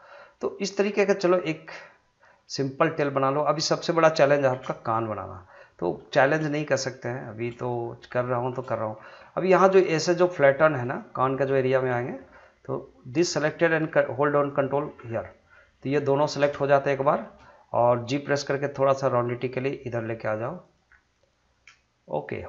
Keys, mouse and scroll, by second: 0.8 scroll down 1, 2.8 middle click, 4.5 shift+z, 4.9 middle click, 6.5 scroll up 1, 7.2 shift+middle click, 7.4 shift+scroll down 1, 7.5 scroll up 1, 8.1 shift+scroll up 1, 8.2 shift+middle click, 8.7 scroll down 1, 9.2 middle click, 9.9 scroll up 1, 10.2 shift+middle click, 11.0 middle click, 12.0 middle click, 13.1 click, 14.5 ctrl+click, 15.0 scroll down 1, 15.3 middle click, 18.1 g, 20.9 scroll down 1, 21.4-22.4 middle drag.